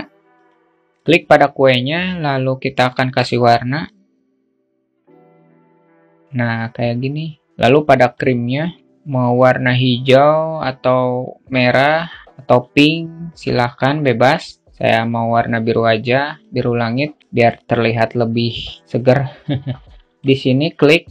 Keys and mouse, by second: 0.9 a, 2.4 click, 3.4 click, 3.7-4.1 drag, 7.6-8.8 drag, 15.8-16.6 alt+middle drag, 19.8-21.1 alt+shift+middle drag.